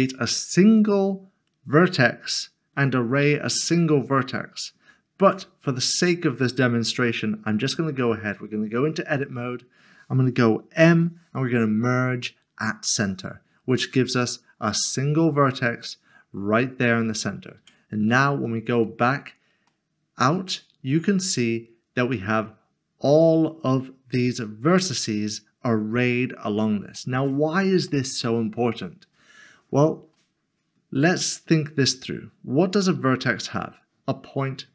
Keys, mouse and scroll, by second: 10.8 m, 12.8 click, 15.8 click, 17.6 Tab, 18.6 scroll, 18.8 scroll down 1, 19.7 middle click, 20.7 shift+middle click, 21.4 middle click, 27.9 middle click, 29.1 scroll up 1, 29.5 scroll down 1.